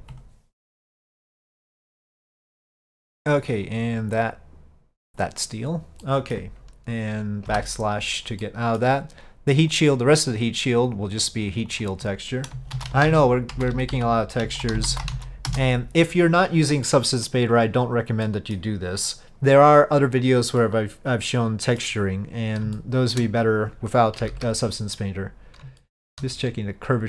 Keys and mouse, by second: 1.5 click, 2.3 click, 3.7-5.4 drag, 6.1-6.4 middle drag, 7.6 KP_Divide, 8.5-8.9 middle drag, 9.8 click, 11.2 click, 11.8 click, 12.0-16.5 drag, 16.9-17.3 middle drag, 18.3-18.6 middle drag, 20.7-21.9 middle drag, 22.8-23.2 shift+middle drag, 24.3 KP_5, 25.9-26.2 shift+middle drag.